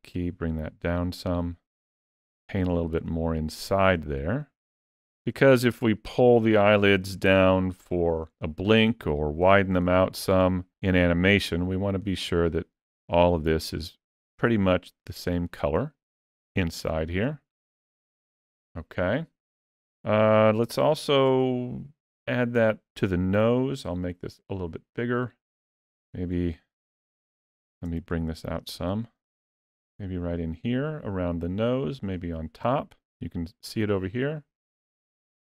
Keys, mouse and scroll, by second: 1.7 click, 2.2 click, 2.6 click, 2.9 click, 3.4 click, 3.8 click, 4.3 click, 4.7 click, 5.2 click, 5.6 click, 6.0 click, 6.4 click, 6.9 click, 7.3 click, 8.8 click, 9.3 click, 9.7 click, 10.1 click, 10.8 click, 11.2 click, 11.9 click, 12.4 click, 12.8 click, 13.2 click, 13.7 click, 14.3 click, 14.8 click, 15.2 click, 15.6 click, 16.1 click, 16.6 click, 17.1 click, 17.9 click, 20.6 shift+middle click, 21.3 middle click, 23.1 f, 25.1 middle click, 26.6 ctrl+middle click, 27.3 shift+middle click, 27.9 ctrl+middle click, 28.8 shift+middle click, 30.0 click, 32.0 click, 34.6 click, 35.1 middle click.